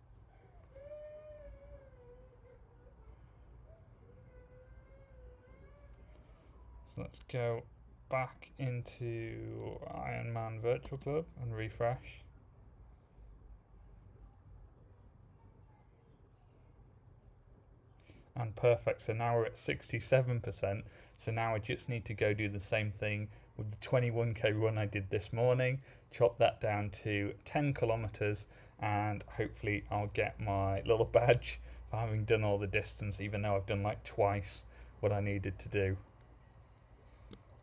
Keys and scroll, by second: 10.8 super+r.